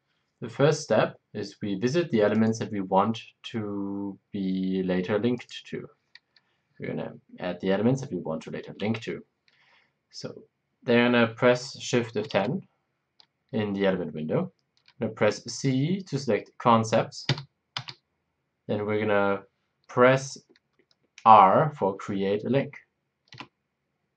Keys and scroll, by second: 12.3 shift+F10, 17.7 shift+F10.